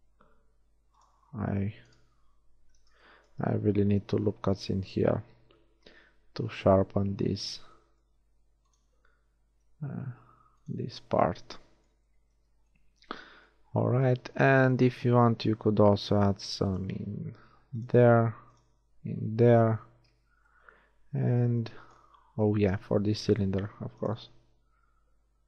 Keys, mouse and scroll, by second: 0.7 ctrl+r, 1.4 click, 2.8 ctrl+z, 4.0 ctrl+r, 5.0 click, 7.7 click, 8.4 ctrl+r, 8.9 click, 11.3 Tab, 14.4 Tab, 16.0 ctrl+r, 18.3 ctrl+r, 20.4 Tab, 22.0 Tab, 23.5 ctrl+r.